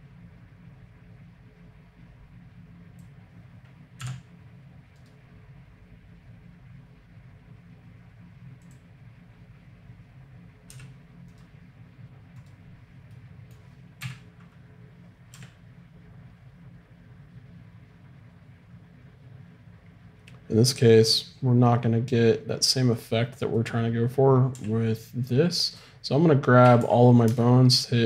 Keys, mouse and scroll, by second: 4.0 n, 10.7 g, 13.2 middle click, 14.1 KP_3, 15.3 g, 24.5 g, 26.6 a, 26.8 a, 27.2 alt+space.